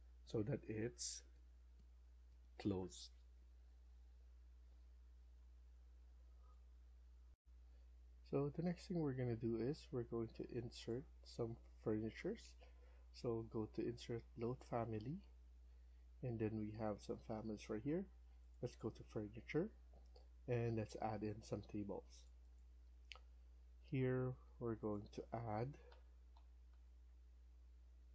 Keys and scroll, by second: 7.2 F1, 25.8-26.6 scroll down 2, 26.6 Down.